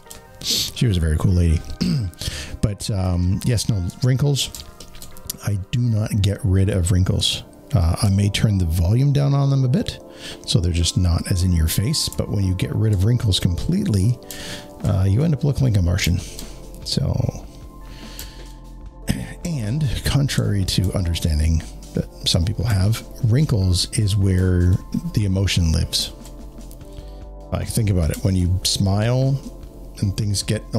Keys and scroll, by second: 0.4 space, 2.9 alt+space, 11.9 alt+space, 19.4 alt+space.